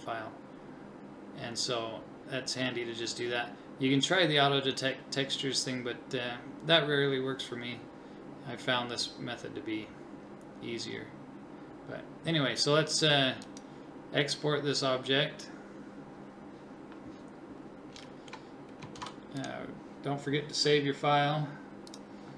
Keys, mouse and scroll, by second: 19.0 ctrl+s.